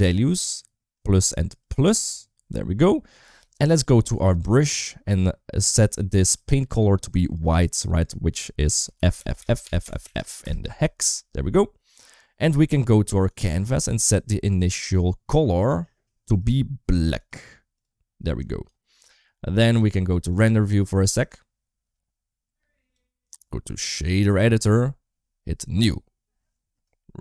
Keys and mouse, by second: 0.7 click, 1.4 click, 4.0 click, 6.2 click, 9.0 shift+f, 9.5 shift+f, 16.3-17.2 drag, 20.1 click, 21.1-22.8 drag, 23.0-24.2 drag, 25.6 click, 26.9 middle click.